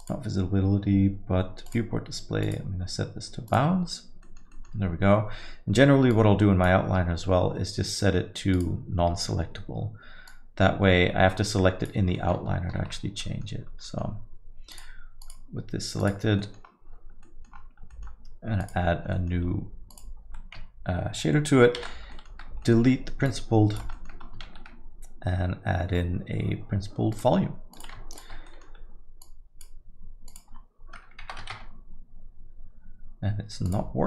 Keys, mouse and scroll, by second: 6.2 alt+middle click, 6.3 click, 8.6 click, 10.3 click, 12.2 middle click, 12.8 shift+F3, 13.2 middle click, 13.7 scroll up 1, 13.9 middle click, 14.7 click, 15.2 click, 16.4 middle click, 16.6-17.6 scroll down 9, 17.2 middle click, 17.9 middle click, 18.6 click, 19.1 middle click, 19.5-20.0 scroll up 4, 19.9 click, 21.9 ctrl+x, 22.2 middle click, 22.5 scroll up 2, 23.3 click, 24.0 middle click, 24.1-24.5 scroll up 4, 24.5 shift+a, 28.2 ctrl+shift+click, 28.5 middle click, 28.8-29.4 scroll up 2, 29.2 click, 30.3 click, 30.4 ctrl+shift+click, 33.7 click.